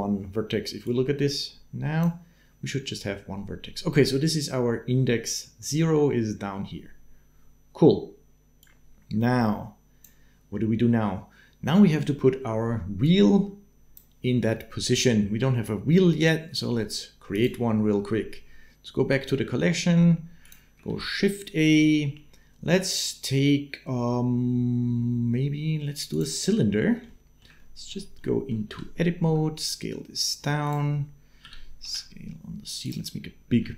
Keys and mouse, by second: 0.9 click, 8.4-9.8 drag, 12.8-13.9 drag, 20.2 click, 20.7 shift+a, 26.9 shift+middle click, 27.4 middle click, 28.0 middle click, 28.5 Tab, 29.0 s, 31.2 s, 33.5 shift+middle click.